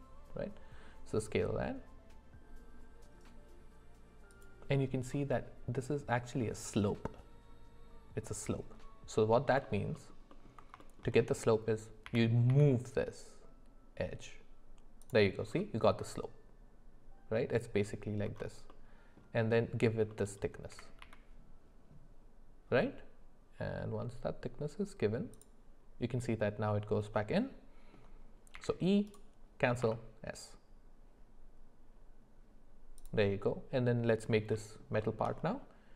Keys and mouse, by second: 9.6 alt+middle click, 9.9 alt+middle click, 10.8 shift+middle click, 12.1 g, 15.9-17.8 middle drag, 20.1 middle click, 20.7 e, 27.1 middle click, 28.5 e, 34.5 middle click, 35.0 shift+middle click.